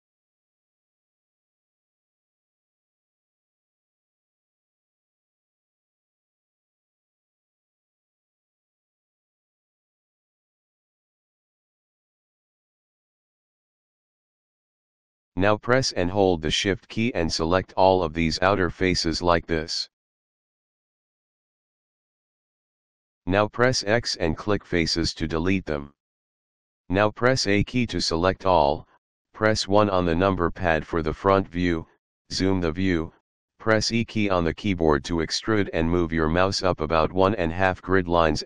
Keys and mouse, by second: 3.8 click, 6.1 click, 9.4 click, 11.5 click, 13.3 Return, 18.2 click, 18.9 shift+click, 20.6 shift+click, 22.2 shift+middle click, 22.8 x, 24.5 click, 27.2 a, 29.5 KP_1, 34.7 e.